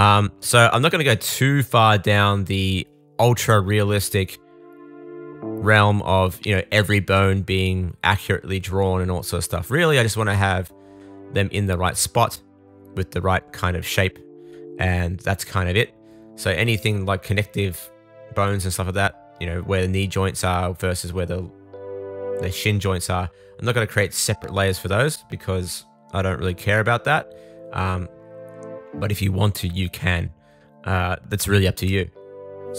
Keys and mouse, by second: 0.3 middle click, 3.4 shift+middle click, 3.9 shift+middle click, 7.2 super+z, 7.8 super+z, 10.7 super+z, 11.5 super+z, 13.4 super+z, 15.6 super+z, 15.8 super+z, 15.8 super+z, 16.3 super+z, 17.2 super+z, 17.4 super+z, 18.4 super+z, 19.9 super+z, 21.2 super+s, 21.9 click, 24.5 super+z, 24.5 super+z, 26.0 super+z, 26.6 super+z, 27.4 super+z, 28.1 super+z, 28.7 super+z, 28.9 super+z, 29.0 super+z, 29.6 super+z, 31.7 super+s, 32.7 shift+middle click, 32.7 shift+click.